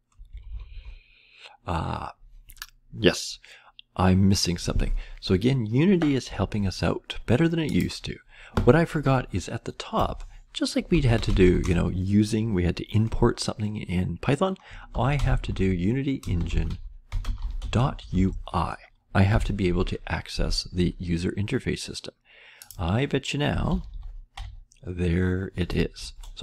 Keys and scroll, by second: 0.0-0.7 typing, 9.9 Return, 10.6-11.9 typing, 14.6-19.8 typing, 23.3-24.3 typing.